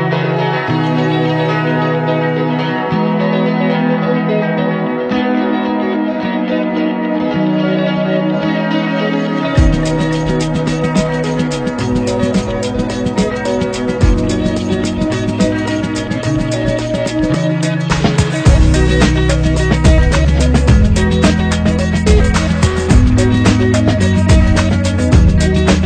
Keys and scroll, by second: 4.4 ctrl+z, 15.3 ctrl+[.